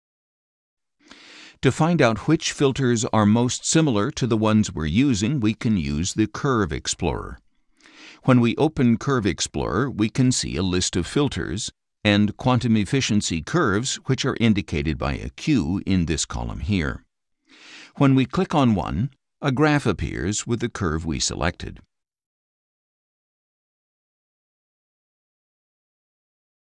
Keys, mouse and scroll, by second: 7.9 click, 11.5-15.4 drag, 18.3 click, 21.5 click, 22.4 click, 23.2 click, 24.2 click, 25.4-26.1 scroll up 2.